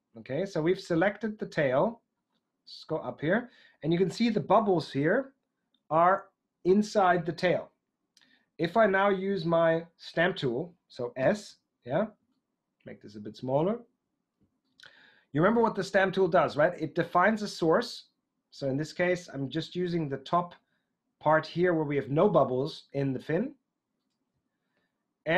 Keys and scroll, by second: 11.2 s.